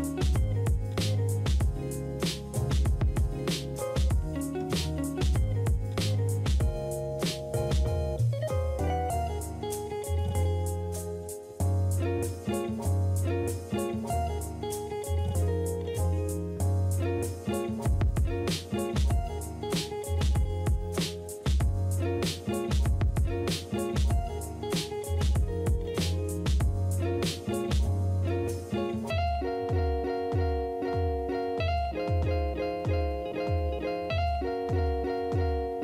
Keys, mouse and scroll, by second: 10.7 space, 13.3 space, 16.6 space, 17.4 space, 20.5 space, 21.9 space, 24.1 space, 25.2 space, 31.3 space, 32.5 space.